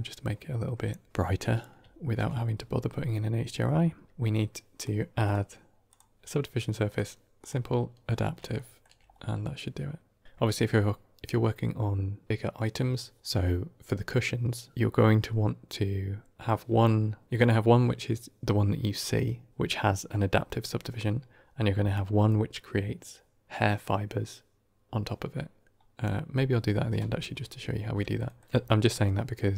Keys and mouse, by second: 1.1 middle drag, 3.5-4.0 middle drag, 5.2-5.8 drag, 6.7 click, 7.3 click, 8.4 shift+middle drag, 28.0 middle drag.